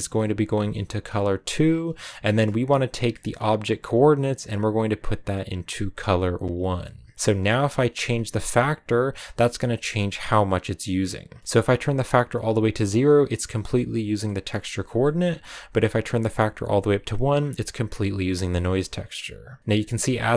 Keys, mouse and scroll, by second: 0.0-1.8 drag, 1.8-2.2 scroll down 6, 2.2-3.3 middle drag, 3.3 scroll up 1, 3.6-6.4 drag, 6.9 middle click, 7.1 scroll up 5, 7.6 scroll down 2, 8.7-11.1 drag, 11.1 scroll up 1, 11.4-15.8 middle drag, 15.8-17.8 drag, 19.6 click.